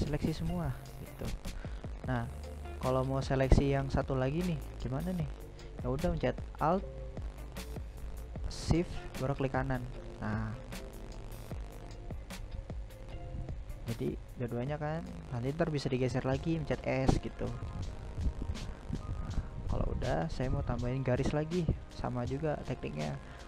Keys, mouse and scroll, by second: 5.7 alt+shift+right click, 8.1-14.6 middle drag, 14.6 right click, 15.2-18.2 middle drag, 18.2-18.5 scroll down 1, 18.5-19.0 scroll up 1, 19.0-20.2 shift+middle drag, 20.2 ctrl+r.